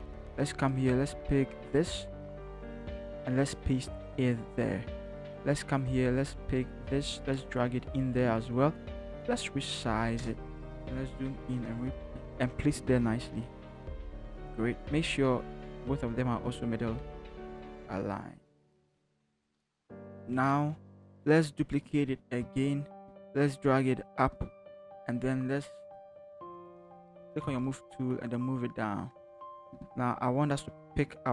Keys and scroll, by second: 2.1 ctrl+c, 3.8 ctrl+v, 10.2 Return, 10.9 ctrl+=, 11.3 ctrl+=, 11.4 ctrl+=, 12.0 v, 13.6 ctrl+t, 14.0 alt+shift+Return, 16.1 ctrl+t, 16.7 ctrl+shift+t, 17.0 ctrl+shift+Right, 17.5 Right, 17.9 Right, 19.4 Right, 19.6 Left, 19.8 Right, 19.8 Return, 20.8 t, 22.4 ctrl+j, 26.4 shift+Down, 27.2 v, 27.6 shift+Down.